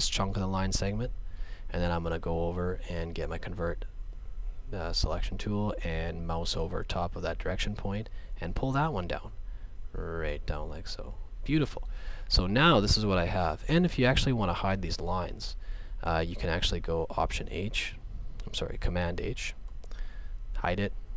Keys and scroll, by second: 19.8 super+h.